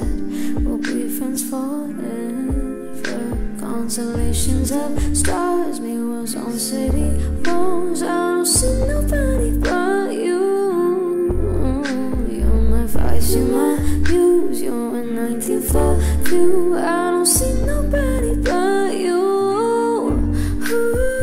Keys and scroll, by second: 4.8 ctrl+c, 6.8 ctrl+v, 12.5 space, 17.1 space, 20.7 ctrl+d.